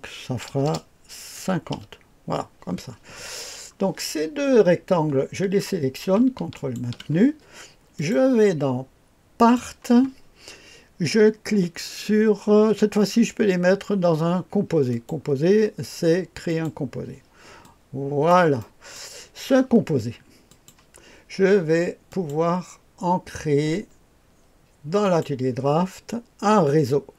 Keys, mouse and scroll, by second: 0.5 BackSpace, 0.6 BackSpace, 1.3 KP_5, 1.7 KP_0, 3.2-5.1 scroll down 1, 6.5 ctrl+click, 7.9 click, 9.4 click, 14.9 click, 16.5 click, 17.6 click, 20.5 click, 22.1 click, 25.0 click.